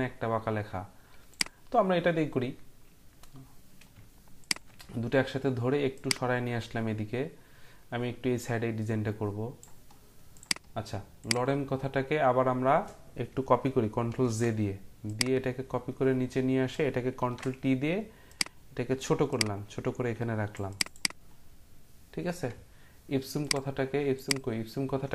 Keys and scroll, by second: 14.1 ctrl+j, 17.2 ctrl+t.